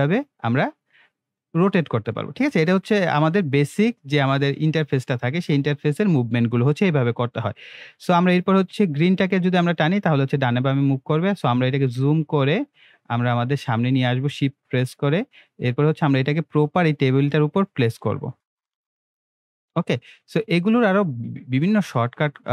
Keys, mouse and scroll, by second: 8.3 click, 8.5-10.8 drag, 10.8 scroll down 1, 11.3 scroll up 1, 12.6-13.5 middle click, 13.5-15.1 shift+middle drag, 15.2 scroll down 1, 15.6 scroll up 1, 17.5-18.4 drag, 19.9 scroll up 1, 20.2 scroll down 1, 20.9-21.8 shift+middle click, 22.1-22.5 shift+middle click.